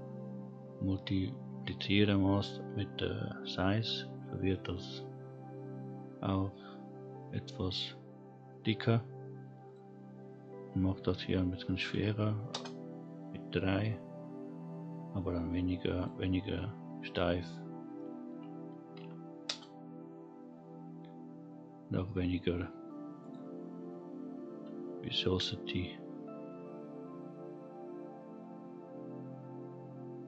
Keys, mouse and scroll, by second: 3.2-3.8 scroll down 2, 3.8-6.3 scroll up 1, 9.6-12.5 drag, 15.9-19.4 drag, 23.2-30.2 drag.